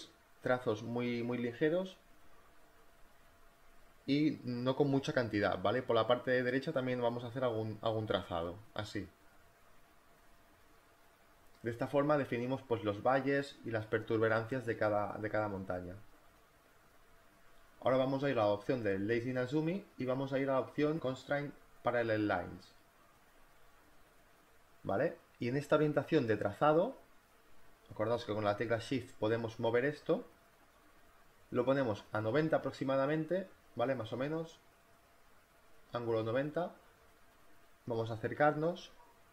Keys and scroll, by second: 14.1 e, 14.6 b, 23.6 space, 37.5 z.